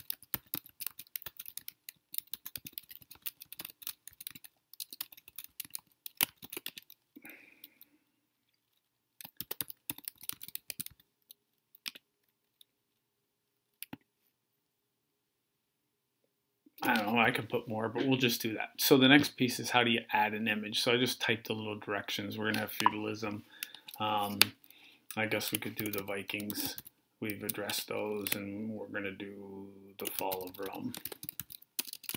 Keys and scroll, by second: 0.0-6.6 typing, 9.0-11.2 typing, 25.4-27.2 typing, 29.6-32.1 typing.